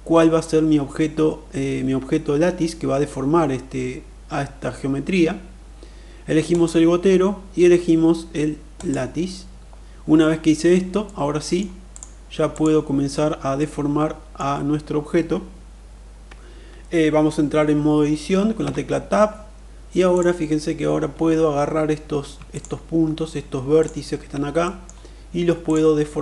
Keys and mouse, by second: 6.2 click, 10.9-11.5 middle drag, 11.7 click, 12.4 click, 13.5-14.3 middle drag, 18.6 Tab, 19.9 click, 23.6 shift+click, 24.4 middle click, 25.6 click.